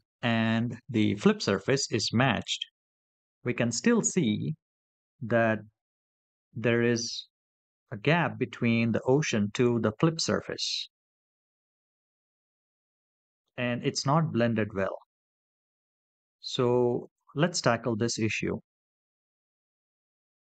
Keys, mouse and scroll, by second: 2.1 scroll up 4, 2.8 scroll up 3, 11.0-11.6 scroll down 4, 12.0-13.3 shift+middle drag, 16.7-17.0 scroll up 3.